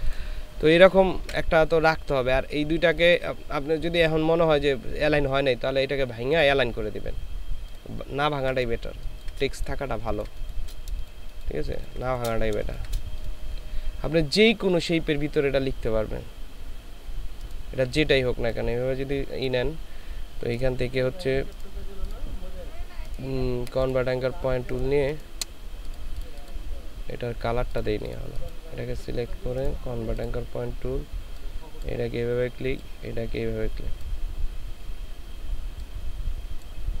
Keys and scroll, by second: 1.2 ctrl+z, 9.0 ctrl+space, 10.0 ctrl+space, 11.0 ctrl+space.